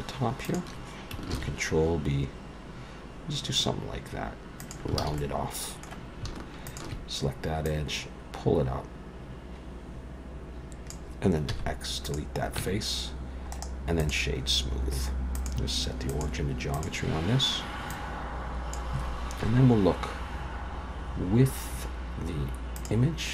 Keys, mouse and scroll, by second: 0.4 alt+shift+click, 1.3 ctrl+b, 5.0 alt+a, 5.2 middle click, 6.7 alt+shift+click, 7.7 click, 11.5 x, 12.6 Tab, 13.5 right click, 14.5-15.4 scroll down 1, 15.4 click, 15.4 scroll down 1, 17.1-17.6 scroll down 1, 17.9 click, 19.4 KP_1, 20.7-21.6 scroll down 3, 21.4-22.5 scroll up 3, 22.8 click.